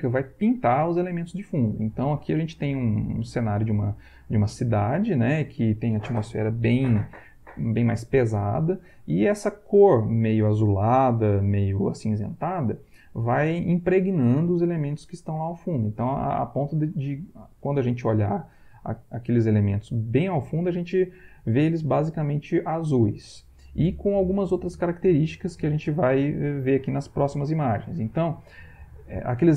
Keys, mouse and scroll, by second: 26.5 Right.